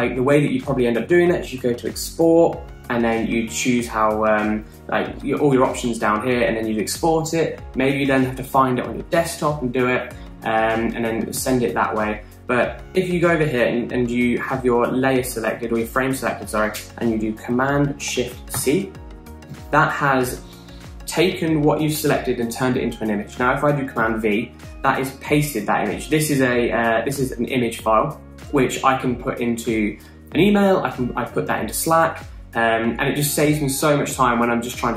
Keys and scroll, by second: 19.6 shift+super+c, 25.0 super+v.